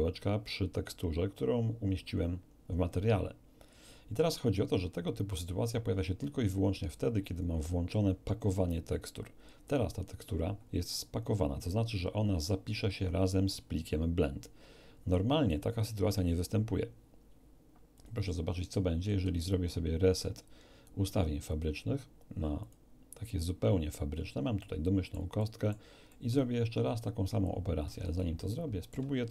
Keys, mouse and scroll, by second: 17.9 click, 21.4 click, 22.6 click, 24.1 scroll up 2, 24.6-25.3 middle drag, 26.0 middle click, 27.4 click, 28.4 ctrl+middle click.